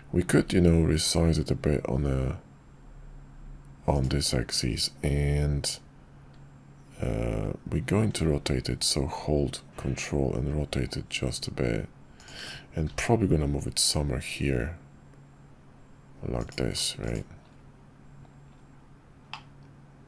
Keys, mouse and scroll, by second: 7.3 r, 12.8 g, 19.3-20.0 middle drag.